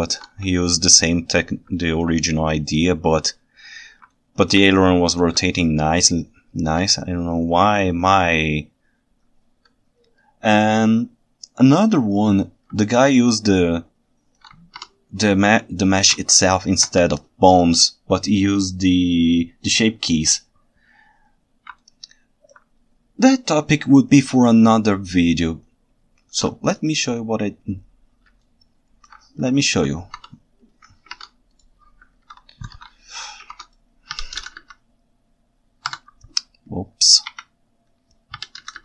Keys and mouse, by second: 1.8 ctrl+alt+right drag, 4.1-4.5 ctrl+alt+right drag, 5.5-6.7 ctrl+shift+right drag, 9.2 ctrl+alt+right click, 12.9-14.4 ctrl+shift+right drag, 15.8 ctrl+alt+right click, 21.8-22.5 ctrl+alt+right drag, 28.4-29.1 ctrl+shift+right drag, 29.6 ctrl+alt+right drag, 31.1 ctrl+Tab, 32.2 alt+h, 32.8 alt+a, 33.5 ctrl+Tab, 34.2 r, 34.5 x, 36.0 Escape, 37.3 KP_1, 38.4 r, 38.7 x.